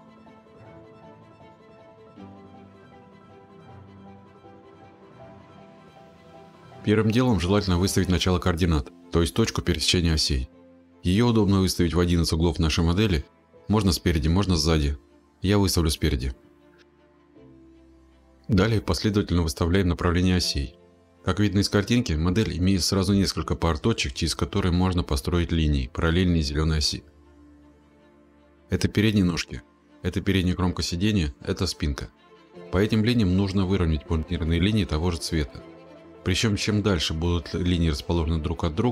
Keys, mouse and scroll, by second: 1.6 scroll, 19.1 click, 19.7-23.4 scroll, 25.8 click, 32.6-33.1 scroll, 37.8 click.